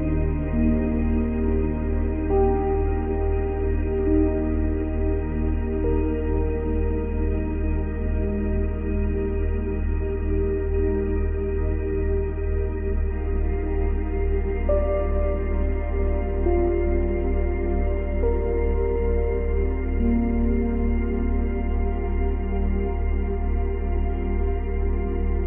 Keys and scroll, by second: 9.4 ctrl+z.